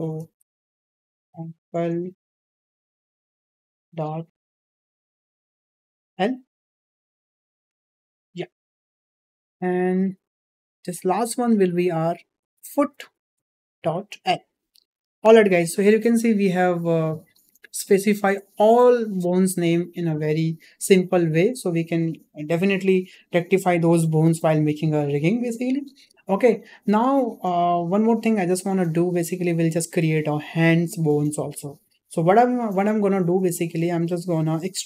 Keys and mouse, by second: 10.0-10.4 middle drag, 10.7 click, 11.8-16.0 drag, 13.1 o, 16.5 `, 18.0 shift+middle drag, 21.0 shift+middle drag, 21.6-21.9 shift+middle drag, 28.6-28.9 shift+middle drag, 33.8 click.